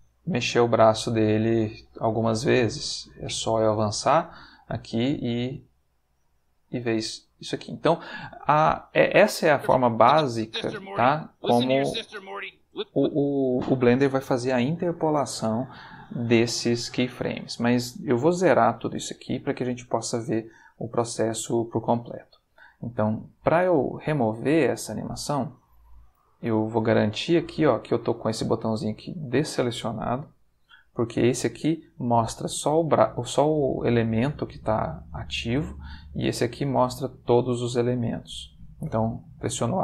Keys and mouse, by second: 0.6 click, 1.1 click, 1.3 r, 2.1 click, 3.1-4.5 drag, 4.9 r, 5.5 click, 6.0 click, 6.9 r, 7.4 click, 8.7-10.1 drag, 10.3 space, 12.7 space, 26.6 click, 27.3 click, 28.6 click, 29.1 click, 31.1 click, 36.3 click, 38.8 a.